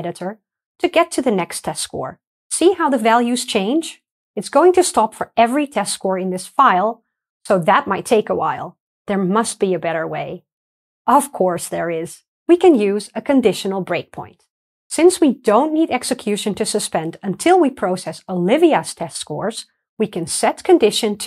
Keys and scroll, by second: 0.1 alt+super+r, 0.1 F9, 1.7 alt+super+r, 1.7 F9, 14.6 super+F2, 20.1 super+c.